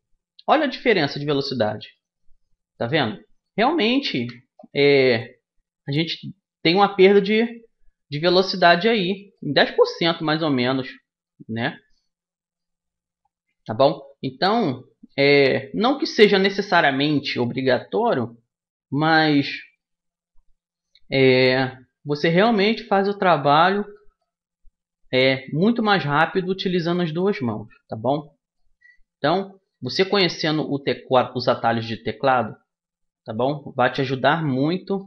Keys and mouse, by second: 1.6-5.3 middle drag, 3.8 KP_1, 5.3-9.0 drag, 9.0-11.6 middle drag, 13.2 middle click, 13.6-14.9 drag, 15.6 middle click, 16.0 KP_1, 17.0 middle click, 20.1-21.1 middle drag, 21.1 click, 21.1 right click, 21.9 middle click, 22.1 click, 23.8-25.4 middle drag, 25.4-27.2 right drag, 26.6-28.4 drag, 28.6-32.2 middle drag, 32.2-33.9 drag, 34.9-35.0 middle drag.